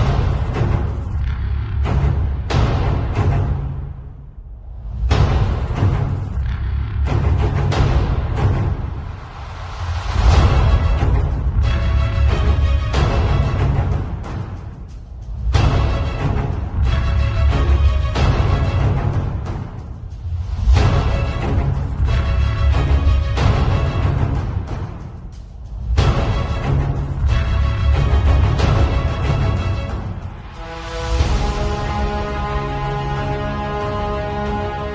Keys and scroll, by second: 2.9 Return, 3.9 super+t, 7.0 z, 9.5 b, 13.4-15.2 typing, 21.9 [, 23.3 z, 24.5 v, 24.7 space, 26.3 shift+super+a, 30.9 super+l.